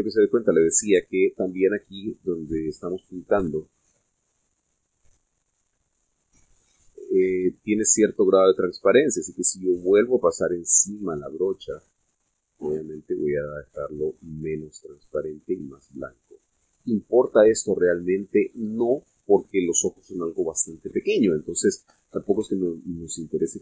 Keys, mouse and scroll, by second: 0.6 ctrl+z, 1.1-5.6 ctrl+drag, 6.5-10.1 drag, 10.8-12.3 drag, 12.7-20.2 drag.